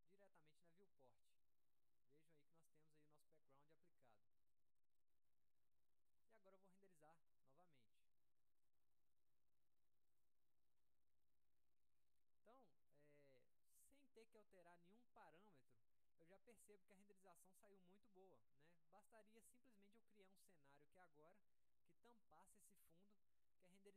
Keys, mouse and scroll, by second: 0.1 alt+middle click, 0.9-4.1 alt+middle drag, 4.1-4.5 scroll up 1, 4.7 middle click, 4.9 scroll up 1, 5.2-6.2 alt+middle drag, 6.4 middle click, 7.2 middle click, 7.9-8.5 scroll down 1, 8.8 alt+middle click, 9.3 scroll up 2, 10.3 click.